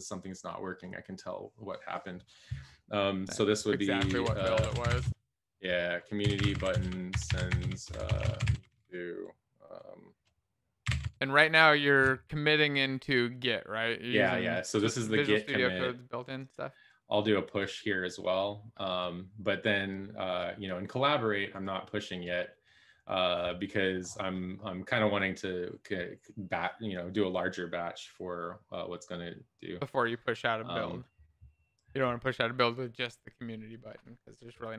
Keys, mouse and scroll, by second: 3.9-9.0 typing, 10.7-12.6 typing.